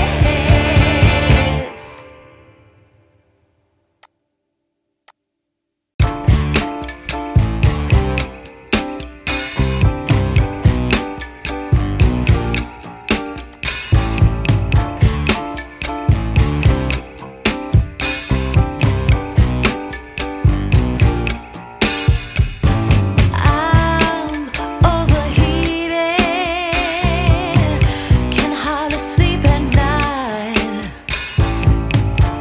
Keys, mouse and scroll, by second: 5.0 click, 8.3 shift+a, 14.5 click, 16.1 click, 20.4 click, 22.1 F10, 26.6 click, 29.1 click, 30.7 click, 32.2 click.